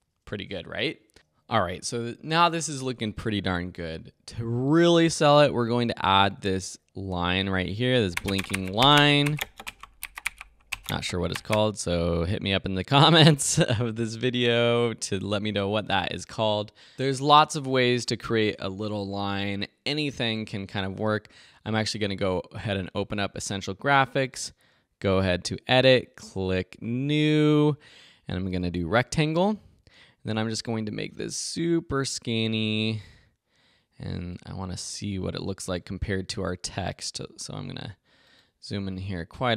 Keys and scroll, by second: 0.3 `, 1.1 space, 6.7 space, 13.9 space.